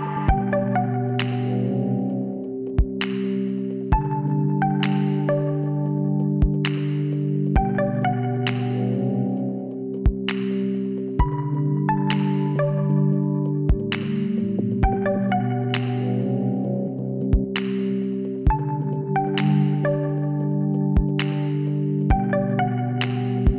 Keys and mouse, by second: 2.4 Tab, 4.5 middle click, 8.4 middle click, 9.5 KP_7, 11.0 z, 13.5 Tab, 15.4 l, 16.5 s, 23.3 r.